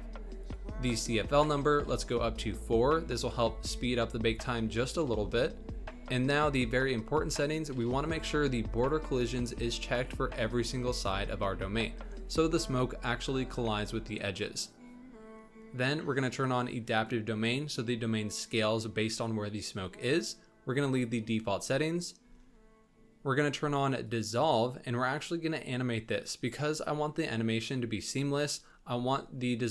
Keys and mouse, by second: 0.5-2.1 drag, 8.8 click, 9.5 click, 10.0 click, 10.5 click, 11.0 click, 16.4 click, 16.9 click, 24.1 click.